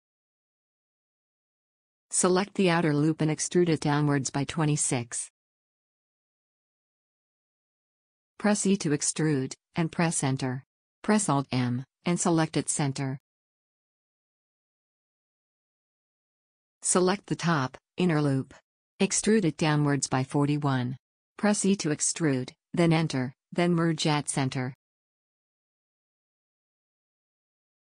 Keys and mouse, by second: 3.7 e, 8.8 e, 11.4 alt+m, 16.6 a, 19.5 e, 21.7 e, 23.0 alt+m.